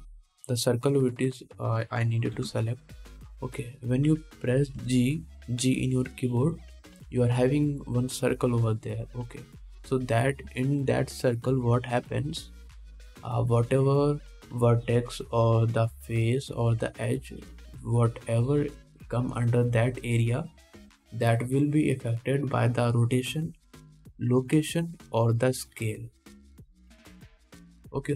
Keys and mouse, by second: 1.8-28.1 middle drag, 3.6 g, 6.0 g.